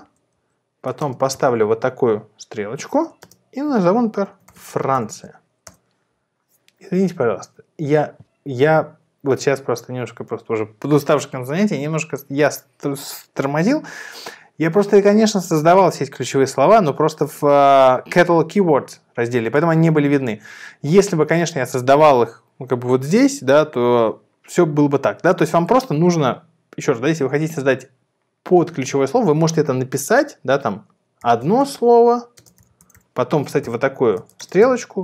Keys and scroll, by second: 0.1 Down, 0.3 Right, 1.5 shift+., 4.0-5.5 typing, 5.7 Return, 31.0-35.0 typing.